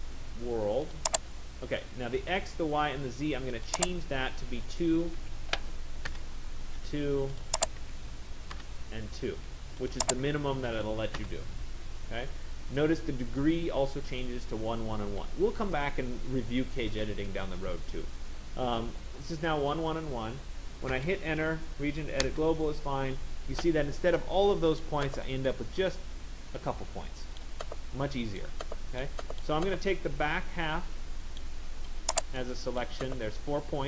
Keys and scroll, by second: 5.8 Return, 20.7 Return.